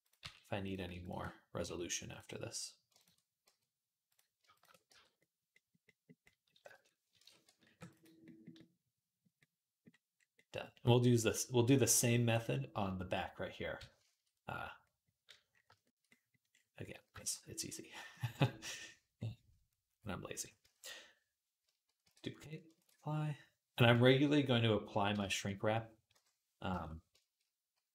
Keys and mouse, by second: 0.0 e, 0.8 click, 1.5 f, 3.3 f, 3.9 click, 4.2-21.4 middle drag, 4.2 shift+a, 4.7 f, 7.0 shift+Tab, 7.5 ctrl+r, 20.5 Tab, 21.4 shift+click, 21.9 shift+d, 22.2 ctrl+click, 22.6 ctrl+a, 25.0 shift+click, 25.5 middle click, 25.9 /, 26.5 ctrl+click, 26.5 ctrl+Tab, 26.6 middle click, 26.9 shift+click, 27.1-27.9 middle drag, 27.8 z.